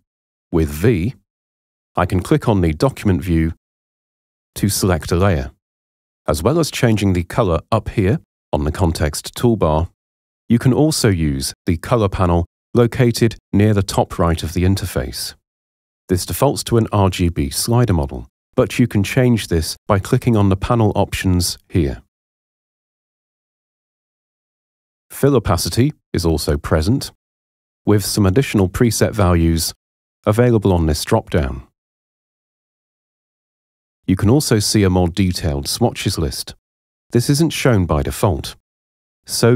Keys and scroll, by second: 0.1 v.